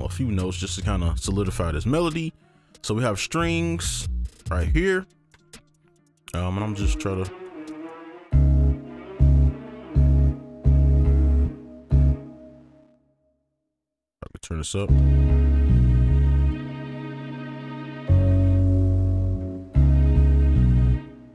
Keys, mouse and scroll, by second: 3.4 double click, 5.3 right click, 8.7-12.1 typing, 13.8 ctrl+click, 14.3 scroll up 1, 14.8 space, 19.5 space, 19.7 space, 20.3 alt+click, 20.9 space, 21.2-21.3 alt+scroll down 6.